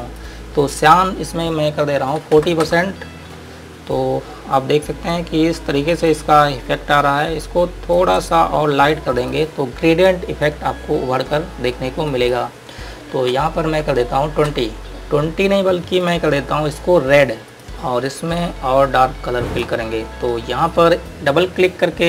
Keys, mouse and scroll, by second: 2.3 KP_4, 2.4 KP_0, 2.9 KP_Enter, 5.4 click, 7.7 click, 9.5 click, 12.4 click, 13.6 KP_2, 14.8 KP_Enter, 16.3 click.